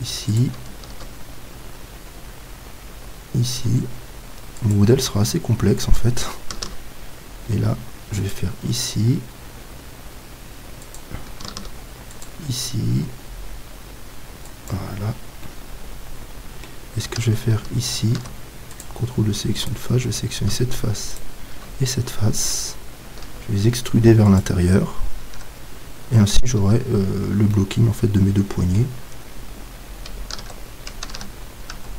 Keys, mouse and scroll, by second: 0.4-4.3 drag, 6.0-10.1 drag, 6.6 ctrl+r, 11.0-16.6 drag, 11.5 ctrl+r, 15.3-17.4 middle drag, 18.1 ctrl+Tab, 19.6-23.2 right drag, 21.9-24.4 middle drag, 23.2 e, 24.4-26.3 drag, 25.3 Tab, 26.6 z, 27.1-31.7 middle drag, 30.4 ctrl+Tab, 31.7 ctrl+Tab.